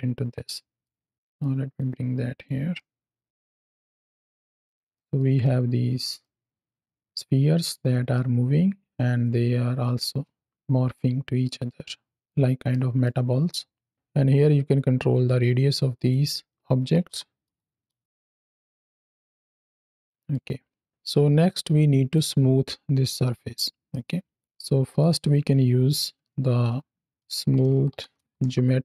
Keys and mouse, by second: 0.4 middle click, 1.1 middle click, 1.6 click, 2.6 middle click, 3.6 click, 4.8 middle click, 5.4 space, 6.1-7.6 middle drag, 8.0-8.8 middle drag, 9.9 space, 10.8-11.3 middle drag, 12.1 middle click, 12.6-12.9 middle drag, 13.1 space, 15.8-17.8 drag, 18.0 space, 18.4-19.0 middle drag, 20.0 middle click, 20.3 space, 20.9 middle click, 21.4 click, 23.8 middle click, 24.3 click, 24.6 shift+a, 27.6 o.